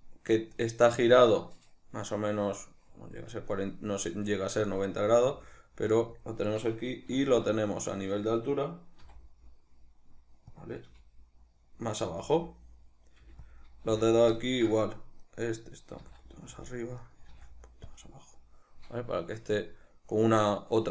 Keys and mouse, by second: 6.2 click, 7.2 alt+q, 9.0 r, 10.6 click, 10.9 g, 11.8 click, 12.2 g, 12.7 click, 13.2 g, 13.5 click, 13.9 z, 14.4 ctrl+middle click, 15.2 right click, 16.0 g, 16.6 click, 17.0 right click, 17.2 g, 18.0 click.